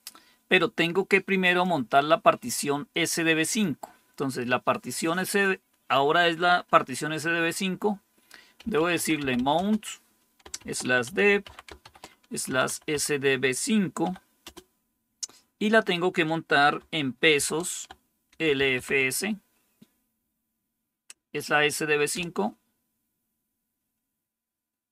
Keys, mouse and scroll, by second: 1.3 click, 3.4 click, 8.5-9.5 typing, 10.5-12.8 typing, 13.9-14.3 typing, 17.3-18.7 typing, 22.0 Return.